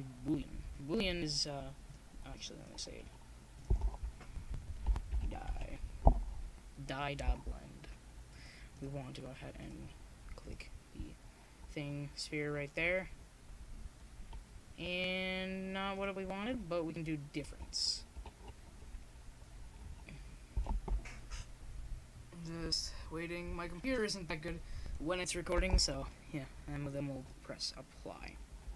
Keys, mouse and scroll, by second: 0.5 click, 0.5 KP_0, 0.7 middle click, 1.9-3.6 middle drag, 2.1 KP_0, 2.5 KP_1, 3.6-4.6 drag, 7.0 ctrl+z, 8.2 KP_7, 9.2-10.5 drag, 10.5 z, 13.2-15.3 drag, 15.9-17.8 middle drag, 17.8-19.8 drag, 20.5 middle click, 20.8 z, 21.6 KP_0, 22.1-23.6 drag, 23.6-24.9 middle drag, 24.9-25.9 drag, 27.9 click.